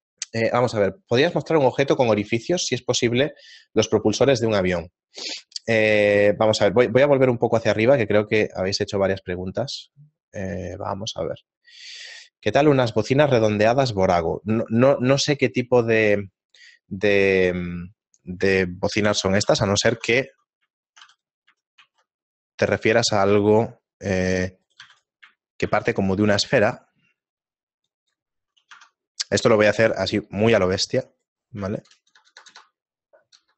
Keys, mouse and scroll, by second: 18.7 middle click, 19.5 Tab, 20.5 Tab, 21.1 shift+right click, 21.1 x, 23.1 shift+a, 23.8 shift+middle click, 24.8 right click, 25.2 x, 25.6 shift+a, 28.7 Tab, 31.2 right click, 32.2 ctrl+KP_Add, 32.3 ctrl+KP_Add.